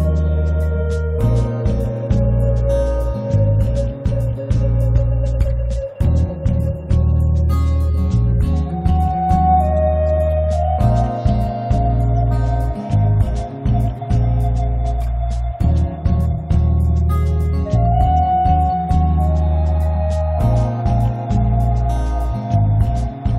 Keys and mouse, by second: 0.7-1.8 middle drag, 0.7 right click, 2.4-4.3 drag, 4.5-6.2 drag, 6.7 g, 6.8 f, 7.1 click, 7.5 click, 7.8-9.4 drag, 7.9 middle click, 8.6-9.9 middle drag, 9.5-10.5 drag, 10.0 middle click, 10.4-12.6 middle drag, 10.8 click, 11.6 click, 12.8 click, 12.8 middle click, 12.8 right click, 13.3 middle click, 13.4 click, 13.8 middle click, 13.9 right click, 14.1 click, 14.4 middle click, 14.5 click, 15.4-17.6 middle drag, 18.1 click, 18.6-19.7 middle drag, 19.6 click, 19.7 alt+F3, 20.6 click, 21.0 click, 21.7 click, 21.9 f, 22.9 click, 23.3 middle click.